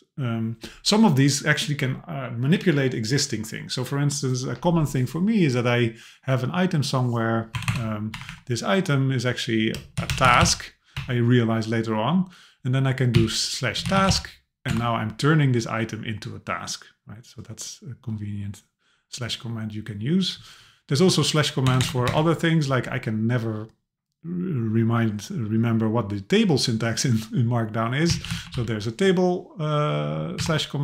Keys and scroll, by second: 7.5 BackSpace, 8.1 Up, 14.7 Return, 20.9 Page_Down, 21.7 Return, 30.4 Return.